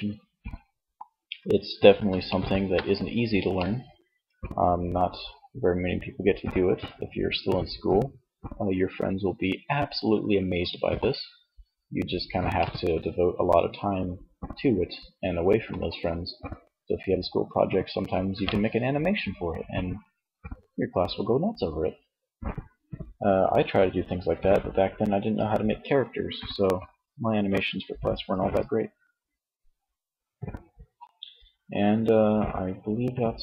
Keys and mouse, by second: 10.2 middle click, 11.7 middle click, 29.7-33.0 middle drag.